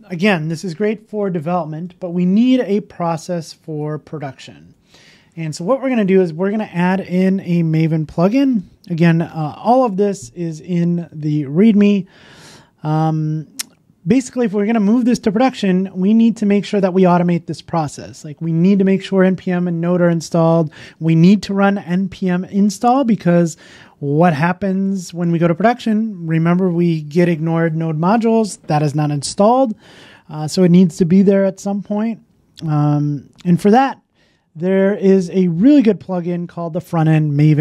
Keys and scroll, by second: 1.3 super+w.